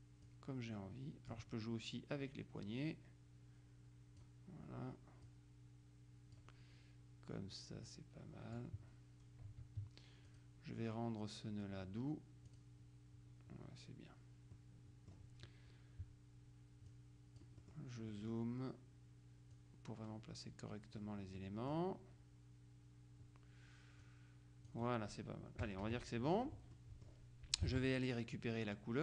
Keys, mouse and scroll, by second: 0.3-1.9 drag, 2.7-4.8 drag, 5.3-6.9 drag, 7.9-9.1 drag, 10.3 click, 12.6 click, 14.7-15.7 middle drag, 17.0-18.3 drag, 17.7 right click, 19.7-21.5 drag, 21.5 middle click, 24.1-25.3 drag, 25.7 KP_Subtract, 26.9 middle click, 27.8 alt+Tab.